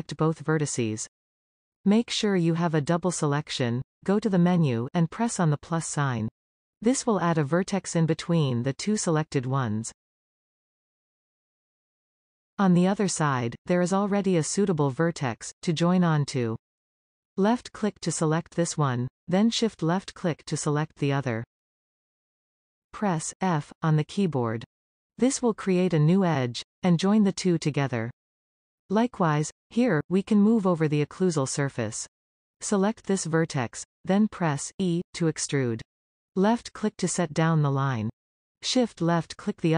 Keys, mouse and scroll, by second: 6.2 click, 8.3-8.9 scroll up 1, 9.2-12.2 middle drag, 17.9 click, 18.7-21.4 middle drag, 21.4 shift+click, 23.0 f, 23.5 scroll down 2, 24.1-26.9 middle drag, 26.9 click, 27.4-29.5 middle drag, 29.5 scroll up 1, 34.1 e, 35.7 e, 37.3-38.7 middle drag, 38.7 shift+click.